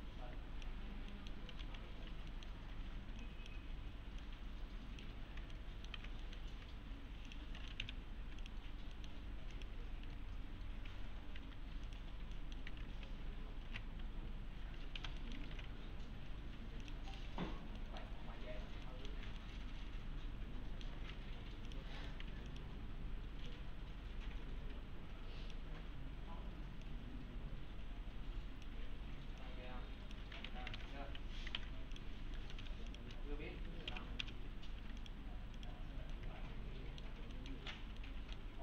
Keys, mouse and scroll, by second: 0.8-1.1 scroll down 1, 1.1 middle click, 1.3-3.0 typing, 2.0 scroll down 1, 2.3 middle click, 2.7 scroll up 1, 3.2 click, 5.1 1, 5.3 scroll down 1, 5.5-6.2 alt+middle click, 6.2 middle click, 7.3 click, 7.6 middle click, 7.8 F4, 8.4 click, 9.0 middle click, 9.1-9.5 scroll down 1, 11.3 click, 11.9 click, 12.4 middle click, 13.7 alt+q, 15.0 F4, 15.2 middle click, 15.5 alt+1, 16.8 click, 17.1 right click, 17.5 scroll up 1, 17.8 middle click, 18.2-18.8 scroll up 1, 18.9 middle click, 19.4-20.3 alt+middle click, 21.0 alt+1, 21.7 click, 22.0 right click, 22.3 2, 22.5 click, 25.9-26.8 scroll up 1, 26.8-28.7 click, 29.7-30.3 click, 30.5 2, 30.8 `, 31.6 alt+`, 31.9 click, 32.4 middle click, 32.6 F4, 32.9 click, 33.9 F4, 35.0 click, 35.8 scroll down 1, 36.1-37.1 alt+middle click, 37.7 scroll down 1, 38.0-38.6 middle click.